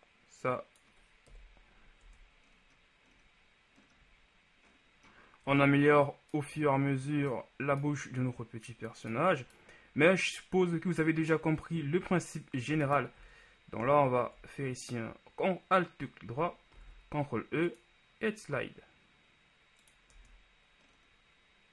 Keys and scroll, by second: 1.5 KP_1, 2.1 Tab, 5.7 Tab, 16.9 ctrl+e, 20.3 Tab.